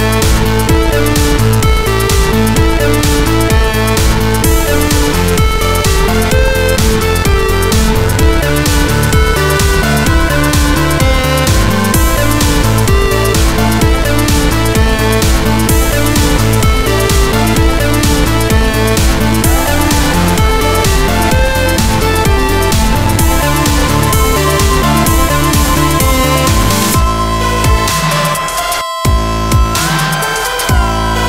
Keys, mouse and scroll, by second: 0.7 click, 1.3 click, 1.4 click, 2.9 click, 3.1 click, 4.0 click, 5.0 alt+middle click, 7.0 click, 8.1 alt+middle click, 10.5 click, 11.4 alt+middle click, 12.1 alt+middle click, 12.5 alt+middle click, 12.8 scroll up 1, 13.1 middle click, 14.4 click, 16.1 click, 16.3 F3, 17.8 click, 17.9 click, 20.4 alt+middle click, 22.6 click, 24.2 click, 26.4 alt+click, 27.9 middle click, 28.5 middle click, 29.6 alt+click.